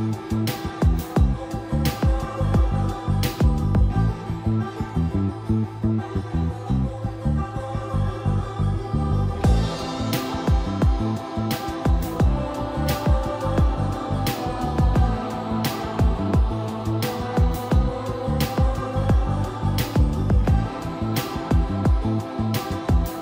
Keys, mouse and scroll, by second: 0.9 3, 1.3 Return, 2.1 scroll down 1, 2.5-2.9 scroll up 1, 2.9-3.3 typing, 3.1 scroll up 1, 3.3 click, 4.8 Escape, 5.5 right click, 6.1 click, 7.3 scroll down 1, 8.2-8.5 scroll up 1, 9.1 shift+middle click, 10.1-10.4 scroll down 1, 10.9-11.4 scroll up 1, 11.4 click, 12.5 scroll down 1, 12.9 middle click, 13.3 scroll up 1, 13.9 shift+middle click, 14.5-16.0 shift+middle drag, 16.3 middle click, 16.9 ctrl+s, 18.1-18.5 scroll up 1, 18.5-19.1 scroll down 1, 19.7 click, 20.6 scroll down 1, 21.1 scroll up 1, 21.4 scroll down 1, 22.1-22.7 scroll up 1, 22.7-23.2 scroll down 1.